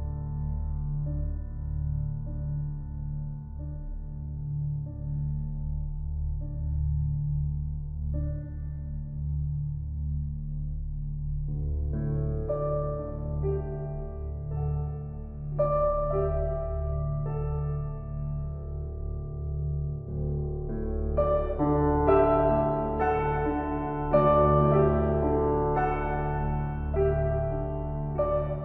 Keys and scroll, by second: 8.2 ctrl+l, 26.3 ctrl+g.